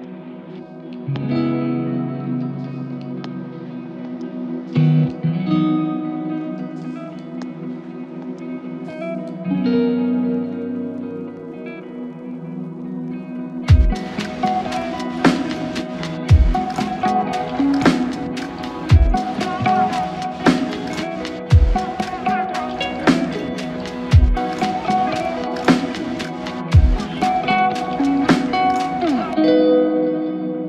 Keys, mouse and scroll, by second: 10.5 double click, 12.8 double click, 18.8 alt+click, 22.0 double click, 24.4 alt+click.